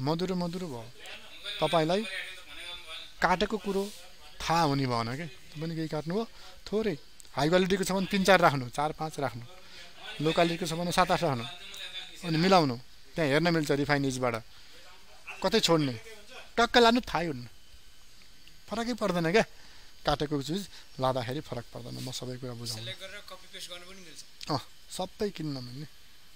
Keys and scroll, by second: 22.5 ctrl+alt+z.